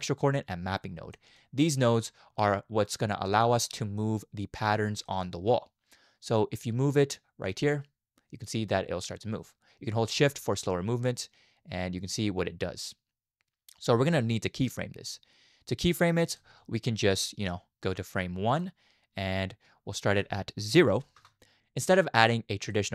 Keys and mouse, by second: 1.5 click, 3.4 middle click, 4.0-4.7 middle drag, 5.1 middle click, 7.6-16.4 drag, 17.4-18.6 drag, 20.1-21.2 drag, 22.6 click.